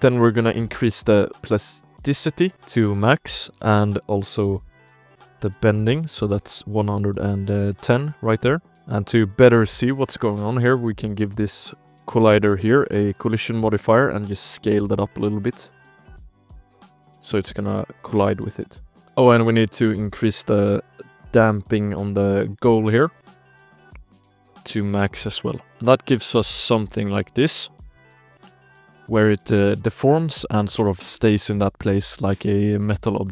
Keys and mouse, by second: 0.6 click, 2.6 shift+click, 3.4 shift+click, 4.2 click, 8.5 click, 8.6 ctrl+space, 8.8 ctrl+s, 8.9 KP_Decimal, 9.8 click, 10.4 shift+drag, 11.5 shift+click, 11.7 drag, 12.5 shift+drag, 13.1 click, 14.0 s, 14.7 s, 15.3 click, 16.8 space, 17.2 drag, 18.0 space, 18.3 click, 18.8 KP_Decimal, 19.1 shift+drag, 20.1-21.8 drag, 23.0 click, 23.8 shift+drag, 24.2 ctrl+s, 24.8 click, 25.2 space, 25.7 space, 26.0 shift+click, 26.4 drag, 27.3-33.3 typing, 27.5-28.1 shift+drag, 28.9 shift+drag, 29.8 shift+drag.